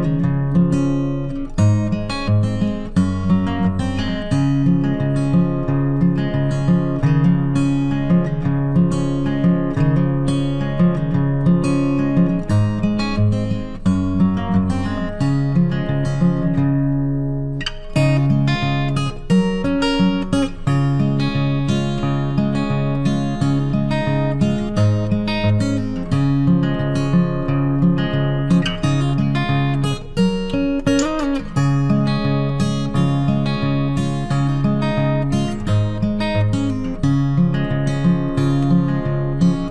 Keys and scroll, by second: 4.4 ctrl+t, 14.8 ctrl+t, 24.9 ctrl+t, 32.9 ctrl+t.